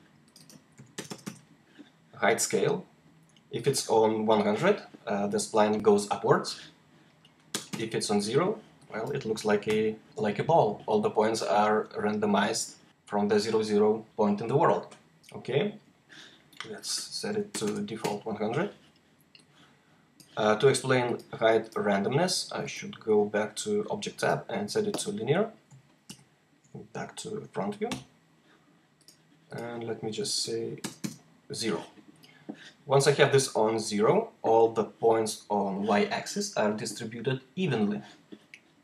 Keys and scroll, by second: 0.6-1.0 typing, 7.4 0, 7.6 Return, 9.6 h, 17.2-17.5 typing, 20.6 typing, 26.0 F4, 27.8 h, 30.7 0.